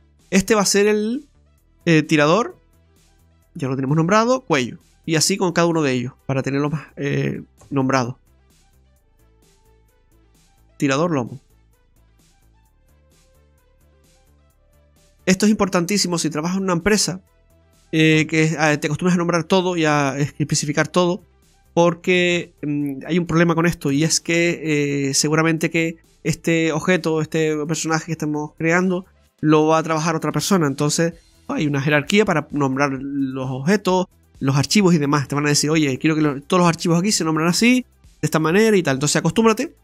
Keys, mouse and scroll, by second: 0.0 right click, 1.1 click, 4.9 click, 5.3 right click, 6.7 click, 15.2 right click, 17.3 click, 25.7 right click, 29.8 click.